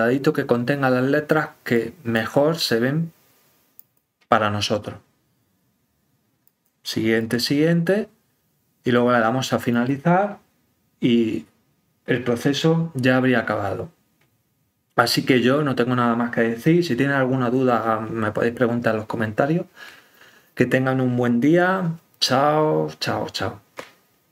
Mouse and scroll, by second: 1.7 click, 3.7 click, 6.4 click, 7.2 click, 9.7 click.